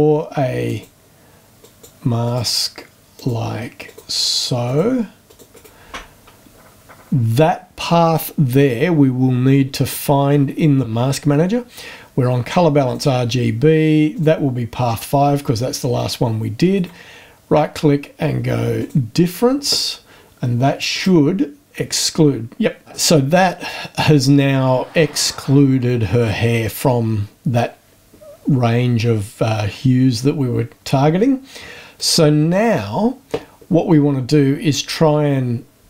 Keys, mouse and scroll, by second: 0.7 click, 1.6 click, 2.2 click, 3.1 click, 3.9 click, 4.7 click, 5.3 click, 5.5 right click, 12.8 click, 14.1 click, 16.7 right click, 18.8 click, 20.9 click, 31.9 click.